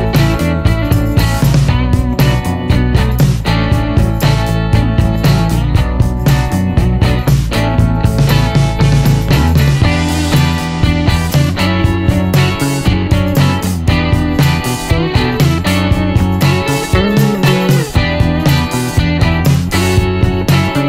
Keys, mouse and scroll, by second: 0.8 l, 1.7 click, 4.2 click, 4.9 middle click, 5.5 click, 7.2 t, 8.5 click, 9.7 click, 11.1 shift+p, 11.7 shift+middle click, 12.1-12.6 shift+scroll up 1, 12.7 middle click, 13.6 l, 14.2 click, 15.1 click, 15.9 right click, 16.1 click, 18.7 n, 19.4 click.